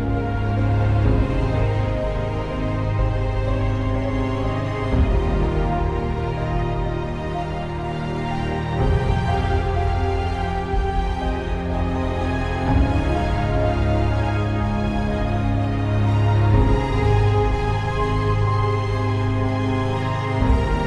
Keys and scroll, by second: 4.1 ctrl+z, 8.5 space, 9.1 ctrl+space, 9.2 ctrl+z, 9.7 space, 11.7 ctrl+shift+d, 11.8 space, 12.7 z, 13.3 z.